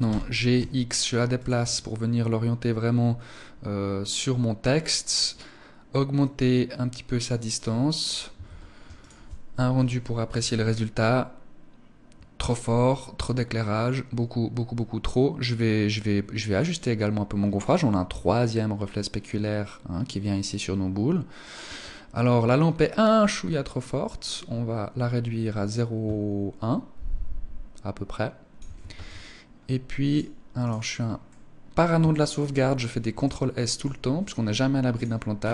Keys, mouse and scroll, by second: 0.9 click, 1.1 middle click, 5.6 click, 7.9 ctrl+s, 21.1 Escape, 22.6 click, 28.3 ctrl+s, 30.1 right click, 30.7 middle click, 31.5 shift+middle click, 31.9-32.4 scroll up 3, 32.6 shift+middle click, 33.5 scroll up 2, 34.4 click, 34.7-35.1 scroll down 5.